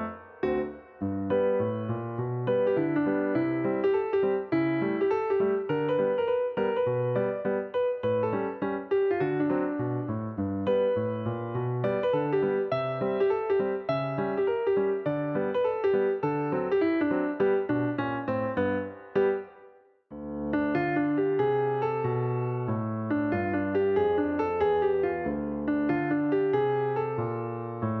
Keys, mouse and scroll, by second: 3.5-4.0 drag, 5.8 click, 8.0 click, 8.9 click, 11.5 click, 13.5 drag, 17.4 click, 18.8 click, 19.6 scroll up 1, 20.7 click, 22.5 click, 23.4 click, 25.4-28.0 drag.